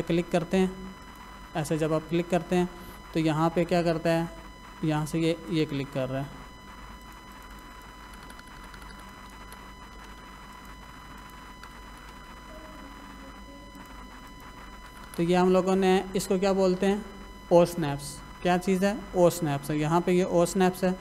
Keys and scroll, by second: 8.1 Escape, 10.0 l, 10.1 space, 11.6 Escape, 12.1 space, 14.9 Escape.